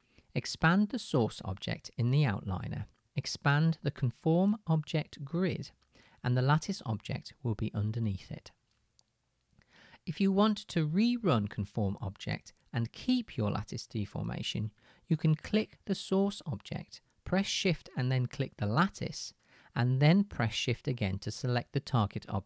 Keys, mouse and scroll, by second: 8.5 click, 9.2-12.4 middle drag, 16.8 click, 18.9 shift+middle click, 19.0-21.4 shift+drag, 21.4 shift+middle click.